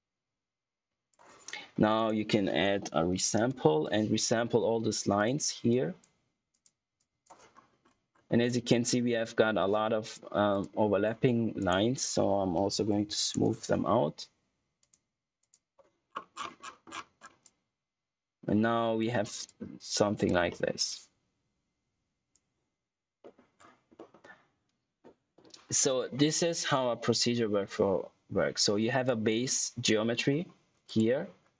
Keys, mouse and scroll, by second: 1.3 scroll down 1, 1.6 scroll up 1, 1.9 right click, 2.8-3.9 typing, 5.1 click, 7.4 scroll up 1, 10.6 click, 11.5 right click, 11.9-13.6 typing, 14.7 click, 16.0-16.8 scroll down 1, 17.3 click, 19.1 scroll down 1, 19.4 click, 20.4 middle click, 20.8 click, 23.1 middle click, 23.4-23.9 scroll down 1, 23.9 middle click, 27.3-28.0 scroll up 1, 28.5 click, 30.0-30.6 scroll up 1, 30.8 click, 31.3 scroll down 1.